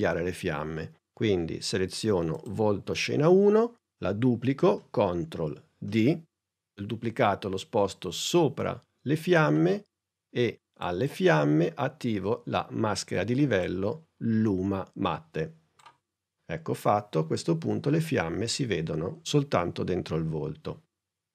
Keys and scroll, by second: 5.9 super+d.